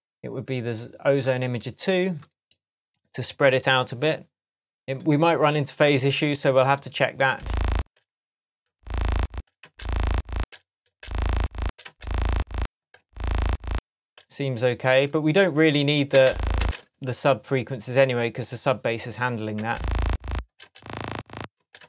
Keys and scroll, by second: 7.2 space, 16.1 space, 19.6 space.